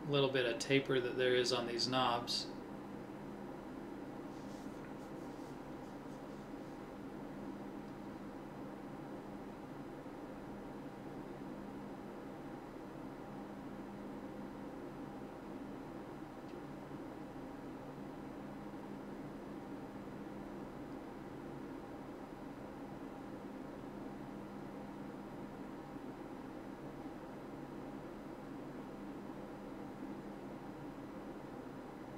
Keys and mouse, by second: 4.6 middle click, 5.0 middle click, 7.0 middle click, 7.5 KP_1, 9.1 a, 10.7 b, 12.0 click, 16.7 l, 17.6 middle click, 20.1 click, 21.2 click, 23.8 middle click, 24.7 middle click, 25.7 middle click, 26.6 KP_1, 31.3 middle click.